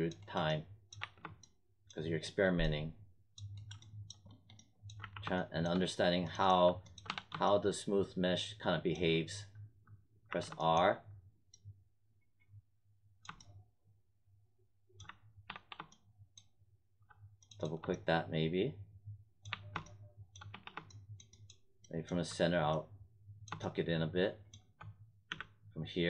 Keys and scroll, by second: 1.0 1, 4.9 w, 7.0 3, 10.2 r, 15.0 1, 15.4 3, 19.4 1, 20.5 3, 25.2 z.